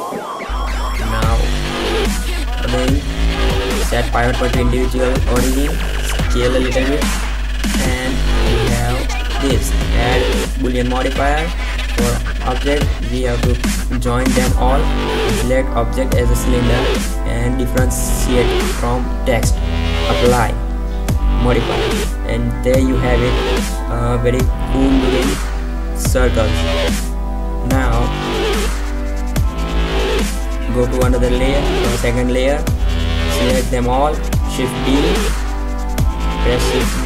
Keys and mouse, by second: 0.4 z, 0.7 KP_1, 4.0-4.6 drag, 4.7 s, 7.1 click, 8.4 Tab, 8.6 Tab, 8.8 z, 12.7 b, 13.4 ctrl+j, 17.3-19.5 drag, 20.2-22.1 drag, 22.8 click, 23.0 Delete, 25.9 Tab, 26.4 Tab, 26.9 Tab, 31.1-33.3 drag, 33.3 shift+b.